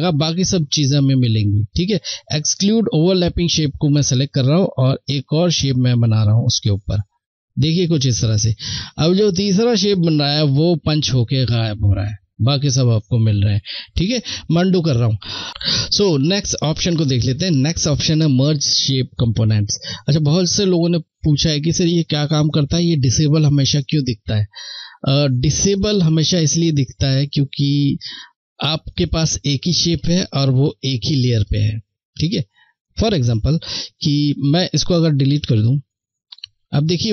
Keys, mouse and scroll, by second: 2.8 click, 13.3 click, 13.5 ctrl+z, 16.5 click, 33.8 Left, 33.8 click.